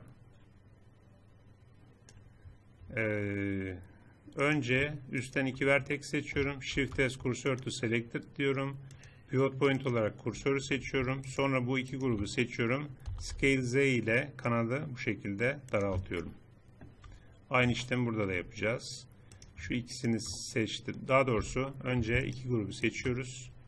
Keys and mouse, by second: 4.5-6.7 drag, 6.7 shift+s, 10.7 click, 11.2-13.7 drag, 13.1 s, 16.1-17.9 drag, 19.3-21.4 drag, 21.4 a.